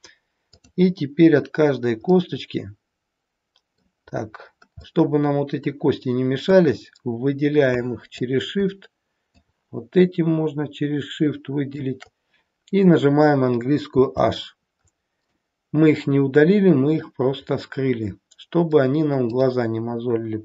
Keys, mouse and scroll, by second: 0.5 click, 1.7-2.1 scroll down 1, 2.1 middle click, 4.0-4.5 scroll down 5, 4.7 scroll down 1, 4.9 middle click, 6.5 click, 9.4 shift+click, 14.0 h, 14.9-15.2 scroll up 2, 15.2 middle click, 17.4-18.4 scroll up 3, 19.2 click.